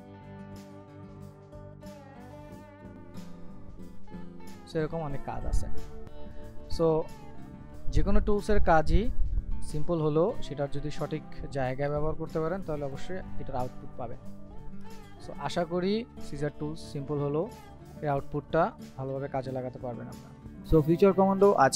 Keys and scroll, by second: 1.0 ctrl+z.